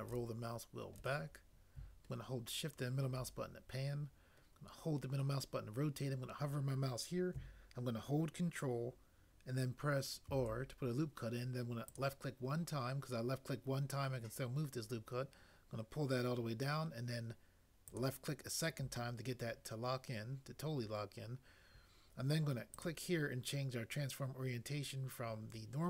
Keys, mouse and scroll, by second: 10.3 ctrl+r.